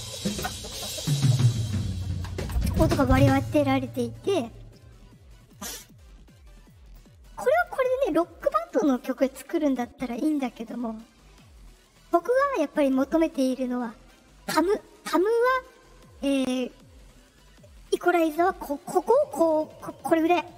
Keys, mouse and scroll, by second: 5.5 click, 6.6 click, 7.6 click.